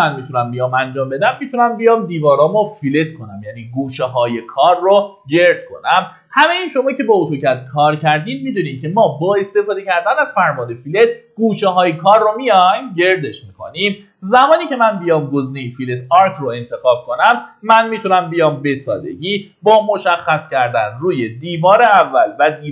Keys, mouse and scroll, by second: 15.3 click, 16.4 scroll down 1, 17.2 middle click, 18.8-19.2 scroll up 1, 21.1 click.